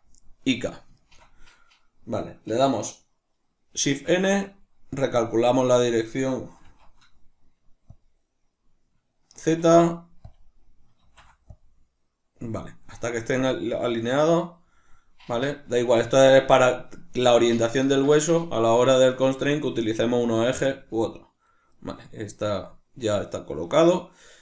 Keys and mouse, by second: 3.9 shift+n, 13.8 middle click, 20.7 middle click.